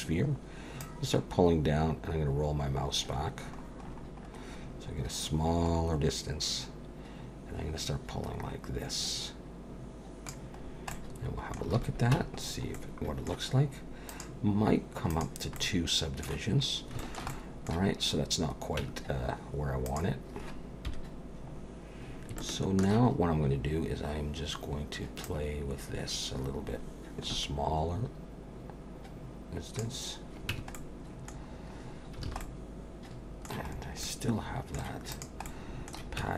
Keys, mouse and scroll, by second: 0.8 click, 10.6-11.3 scroll down 4, 10.9 middle click, 11.7 alt+a, 12.1 Tab, 12.4-13.1 scroll down 2, 12.7 middle click, 14.1 click, 15.1 click, 15.6 middle click, 16.5-17.0 scroll up 3, 17.0 shift+middle click, 17.3 middle click, 18.0-18.8 scroll up 1, 18.8 Tab, 18.8 scroll up 1, 19.9 click, 20.9 KP_1, 21.6-22.3 scroll up 5, 22.4 shift+middle click, 25.2 click, 30.5 Tab, 30.7 middle click, 31.4-32.3 scroll down 7, 32.3 alt+a, 32.4 middle click, 33.7-34.4 scroll up 4, 34.0 middle click, 35.1 click, 35.4 middle click, 36.2 Tab.